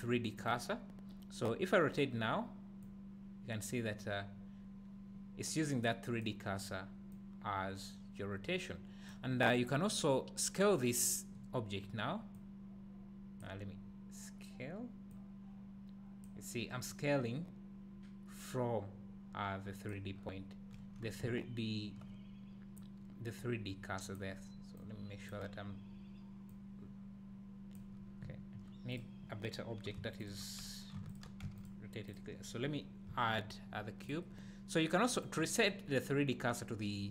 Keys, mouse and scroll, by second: 20.1-21.3 scroll down 2, 21.3 `, 28.1 scroll down 1, 28.3 `, 30.2-31.2 shift+drag, 31.4 x, 32.1 click, 34.0 click, 35.2-37.1 drag.